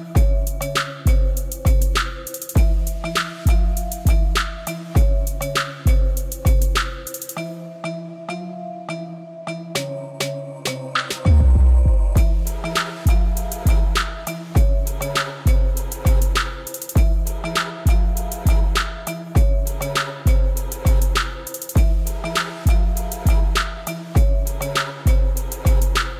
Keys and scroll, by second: 1.2 0, 1.4 ., 3.7 0, 4.1 7, 4.7 Return, 6.8 ctrl+i, 13.6 alt+a.